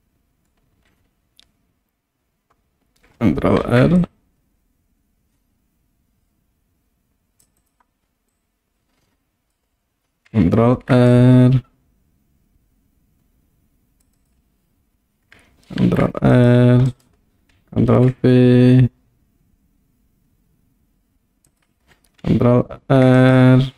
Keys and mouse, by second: 3.6 ctrl+r, 7.6 click, 8.4-9.6 drag, 10.7 ctrl+r, 14.2 click, 15.9 ctrl+r, 16.9 right click, 18.0 ctrl+b, 21.5 click, 22.8 ctrl+r.